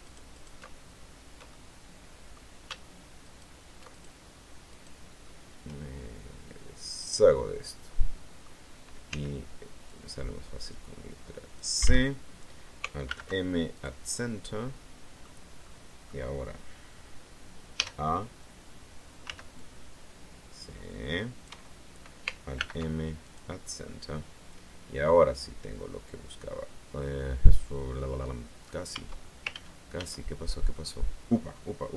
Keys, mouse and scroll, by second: 1.4-2.4 shift+middle drag, 3.1 alt+shift+right click, 3.8 alt+shift+right click, 4.6 shift+right click, 6.7 click, 7.1-8.5 right drag, 9.0 c, 9.7-11.6 drag, 11.6 Escape, 12.9 alt+m, 13.6 click, 14.1-15.3 middle drag, 15.5 middle click, 17.7 a, 19.1 c, 19.4-21.5 drag, 21.3 Escape, 22.4 alt+m, 23.1 alt+click, 23.4-24.0 scroll down 2, 24.0-28.7 middle drag, 28.8 Tab, 29.5 ctrl+z, 30.7 ctrl+middle click.